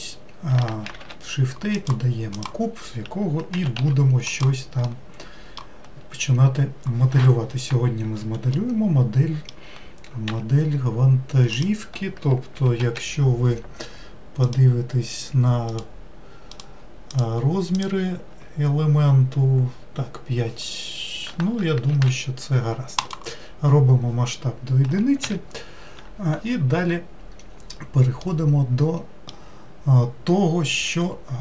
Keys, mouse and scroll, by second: 2.4 shift+a, 3.6 g, 4.9-6.1 middle drag, 6.1-8.5 scroll down 2, 8.5-10.3 middle drag, 10.3 s, 12.8 n, 14.4 click, 15.7 click, 16.5 click, 17.1 click, 17.7 click, 21.9 ctrl+a, 25.2 n, 28.2-31.4 middle drag.